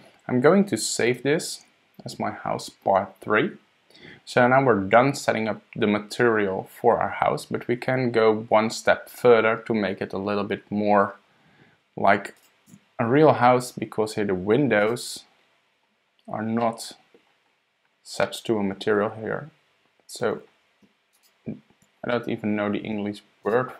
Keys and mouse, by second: 1.1 super+s, 12.7 Tab, 14.8 click, 15.7 click, 16.6-17.2 middle drag, 18.2-18.7 middle drag, 18.7 click, 18.8-20.2 middle drag, 21.1 shift+click, 22.1 click, 22.2 middle click, 23.4 shift+click.